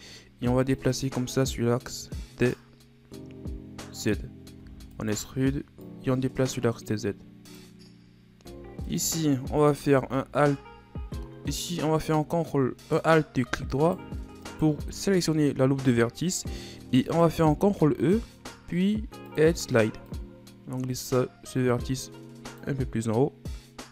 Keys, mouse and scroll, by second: 0.8-3.0 drag, 3.0-3.3 scroll up 2, 4.6 e, 5.9-8.9 drag, 8.9 alt+right click, 9.6 alt+right click, 13.1 right click, 13.8 alt+right click, 14.5 alt+right click, 17.7 ctrl+e.